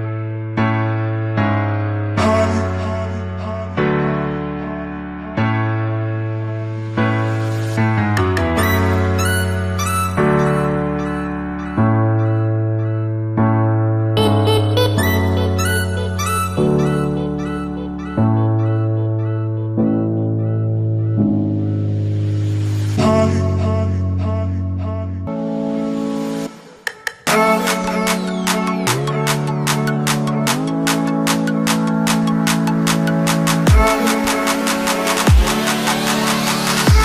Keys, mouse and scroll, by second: 0.0 Escape, 2.5 click, 7.4-10.0 drag, 14.7-15.7 alt+shift+drag, 19.6-20.9 drag.